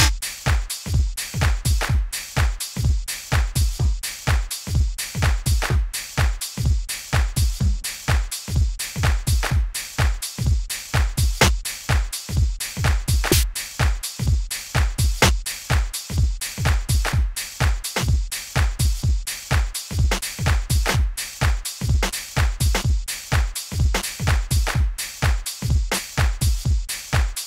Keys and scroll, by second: 14.0 Up, 17.9 d, 20.1 d, 22.0 d, 23.9 d, 25.8 d.